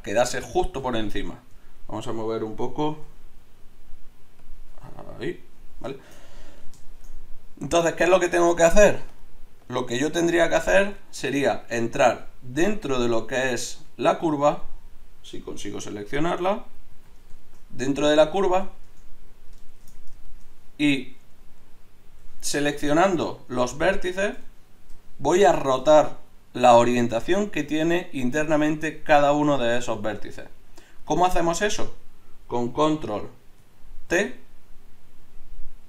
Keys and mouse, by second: 2.9 g, 5.6 click, 6.5 click, 6.8 middle click, 7.0 middle click, 9.1-13.7 drag, 13.7 z, 15.6 z, 16.9 z, 18.8 Tab, 19.7 shift+Tab, 23.8 a, 24.0 a, 34.0 ctrl+t.